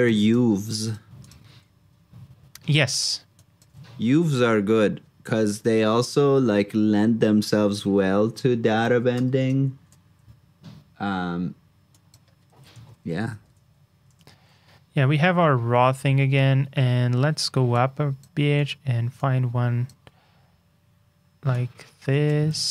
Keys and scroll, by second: 6.4 super+c, 7.3 super+j, 12.5 super+c, 12.7 super+j, 22.5 super+c.